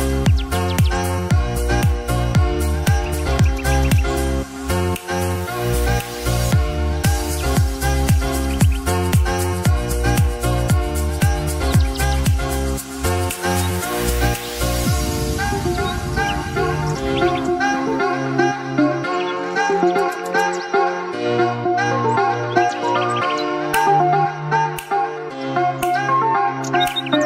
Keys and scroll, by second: 1.0 ctrl+i, 16.8 ctrl+i.